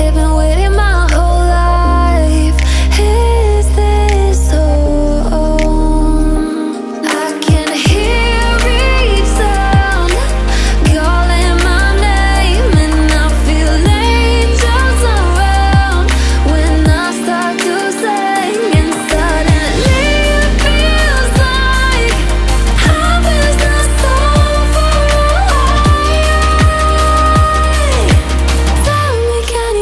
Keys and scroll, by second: 6.6 ctrl+t, 20.1 ctrl+alt+shift+s.